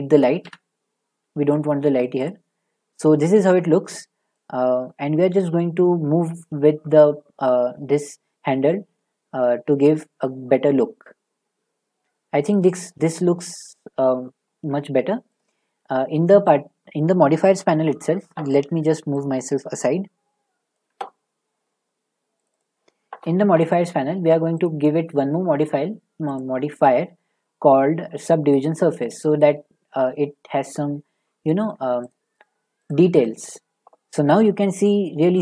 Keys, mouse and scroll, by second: 0.4 Delete, 2.2 click, 12.5 click, 15.4 click, 20.7 click, 22.4 click, 22.6 click, 24.6 click, 26.4 click, 28.6 click.